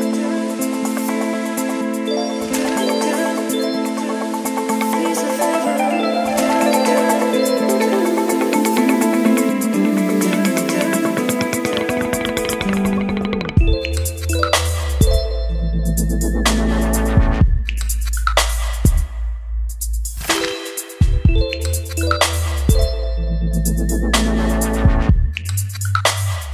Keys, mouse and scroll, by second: 24.6-26.5 typing.